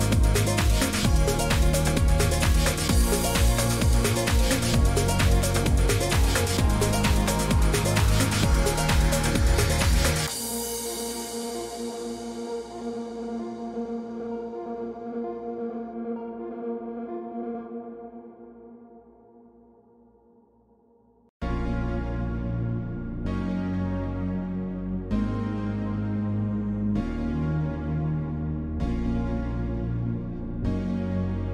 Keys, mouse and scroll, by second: 0.2 click, 4.3 click, 6.1 click, 8.0 click, 8.9 click, 9.8 click, 11.5 click, 14.0 click, 15.3 click, 16.5 click.